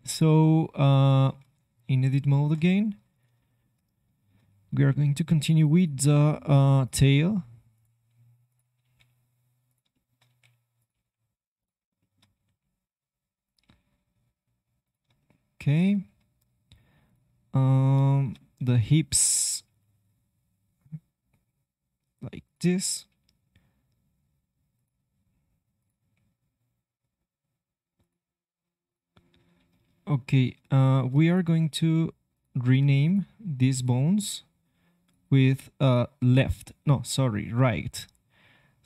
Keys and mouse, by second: 0.0 middle click, 0.8-2.8 drag, 1.5 ctrl+Tab, 4.8 g, 7.0 g, 8.0 g, 8.8 e, 10.2 e, 10.9 e, 12.3 e, 13.6 e, 17.0-18.1 drag, 19.0-20.8 middle drag, 19.6 e, 23.0 e, 25.7 click, 26.1 g, 31.3 click, 31.3 right click, 31.5 g, 32.8-36.8 drag, 33.3 g.